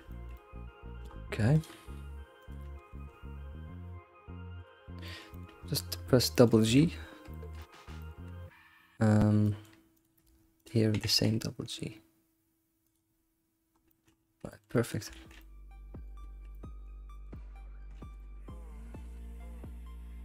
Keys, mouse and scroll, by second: 1.5 click, 2.4 ctrl+click, 2.8 g, 4.9 scroll down 2, 5.1-5.6 shift+middle drag, 5.6-6.1 scroll up 6, 6.3 middle click, 6.7 middle click, 6.9-7.3 scroll down 3, 7.3 alt+middle click, 7.6 middle click, 8.2-9.4 scroll up 2, 9.4 middle click, 10.0 click, 10.6 ctrl+click, 10.9 g, 13.1-13.9 scroll down 4, 13.9 middle click, 14.2 scroll down 3, 14.5 shift+middle click, 15.4 middle click, 16.2 alt+shift+z, 16.5-17.9 middle drag, 17.9 ctrl+s, 18.2-19.7 middle drag.